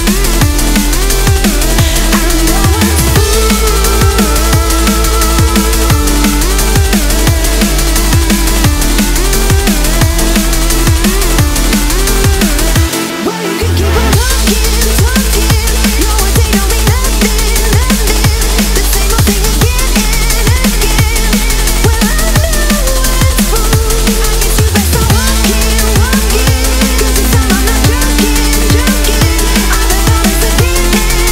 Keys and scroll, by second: 3.1 ctrl+space.